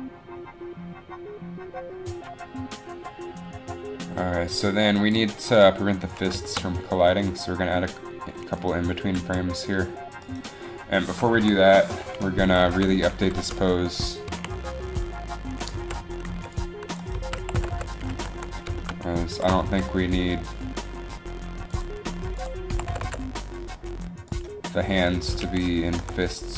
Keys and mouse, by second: 9.3 g, 11.5 Up, 14.4 a, 15.8 z, 16.4 c, 17.2 z, 17.5 r, 18.3 alt+r, 19.5 r, 22.5 z, 22.5 r, 22.9 r, 22.9 r, 25.7 alt+r.